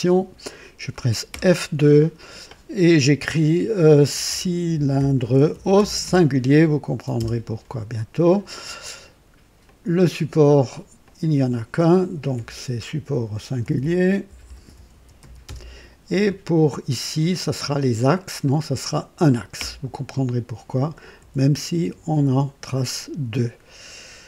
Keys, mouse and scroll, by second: 1.2 F2, 3.8-7.1 typing, 9.5 click, 10.9 click, 12.2 typing, 13.3-15.6 typing, 17.2 click, 18.4 click, 19.5 typing, 21.1-22.0 typing.